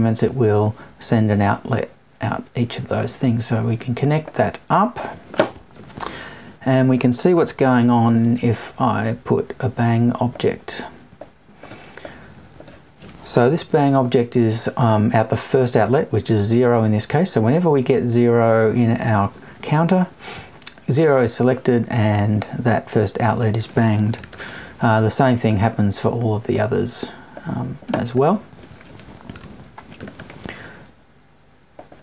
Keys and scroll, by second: 5.7 Right, 13.5 Left.